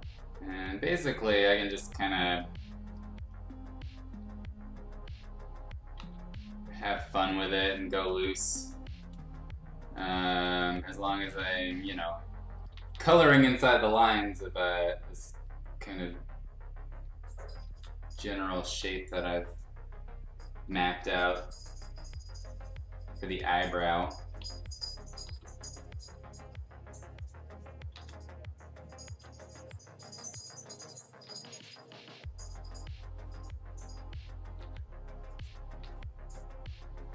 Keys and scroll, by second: 5.9 ctrl+z, 12.7 ctrl+z, 12.9 ctrl+z, 17.6 ctrl+z, 24.4 ctrl+z, 25.2 ctrl+z, 27.9 ctrl+z, 29.2 x, 30.4 x, 31.2 ctrl+z, 34.6 ctrl+z, 35.8 ctrl+z.